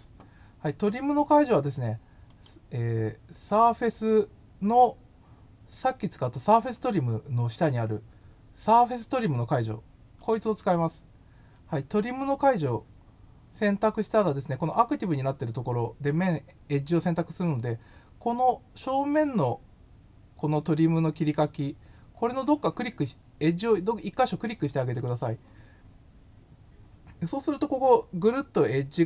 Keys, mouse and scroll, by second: 2.3 click, 10.1 click, 24.9 click.